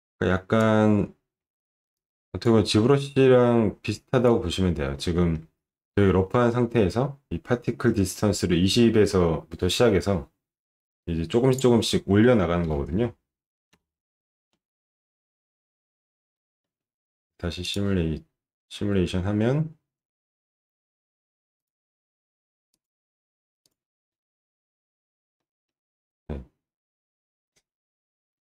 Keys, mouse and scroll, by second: 1.4 alt+middle click, 1.9 click, 3.9 click, 4.9 middle click, 5.2 alt+middle click, 11.5 click, 12.7 5, 13.7 Return, 16.3 middle click, 17.6 click, 21.6 click, 22.8 click, 23.6 click, 25.4 middle click, 26.1 scroll up 1, 27.3-27.6 scroll up 1.